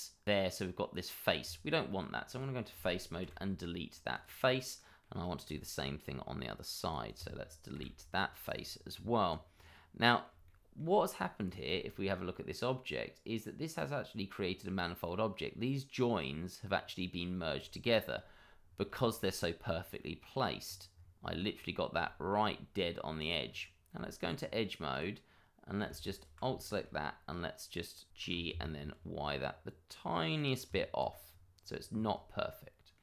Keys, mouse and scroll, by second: 1.4 Tab, 2.3 click, 3.2 Delete, 4.1 click, 4.4-4.7 scroll down 1, 4.7 middle click, 5.2 scroll down 1, 5.5 shift+middle click, 6.0-6.8 scroll up 1, 6.8 click, 7.7 Delete, 8.4 click, 8.9 Tab, 9.5-9.9 scroll down 1, 9.9 middle click, 10.5 shift+middle click, 11.4 click, 11.7 shift+middle click, 11.8 middle click, 12.4 middle click, 14.4-15.0 scroll up 1, 15.0 middle click, 16.6-17.5 scroll down 1, 17.7 shift+middle click, 18.6 scroll down 1, 19.0 shift+middle click, 19.3-19.7 scroll up 1, 19.9 middle click, 20.6-21.2 scroll down 1, 21.5-21.9 scroll up 1, 22.0 shift+middle click, 22.3-23.1 scroll up 1, 23.1 click, 23.4-23.9 scroll up 1, 23.9 Tab, 24.9 click, 25.3-25.8 scroll up 1, 26.1 alt+click, 26.2 click, 26.5 shift+middle click, 26.7 middle click, 26.8 scroll up 1, 28.2 g, 28.4 y, 30.3 click, 30.6 Tab, 31.2-32.1 scroll down 1, 32.2 shift+middle click.